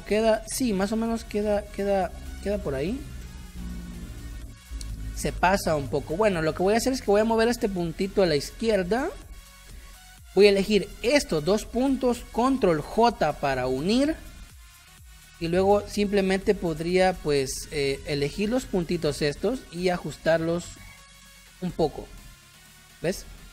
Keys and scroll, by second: 4.5 ctrl+z, 5.5 a, 9.0 space, 10.1 space, 12.8 ctrl+j, 17.1 ctrl+z, 23.0 space.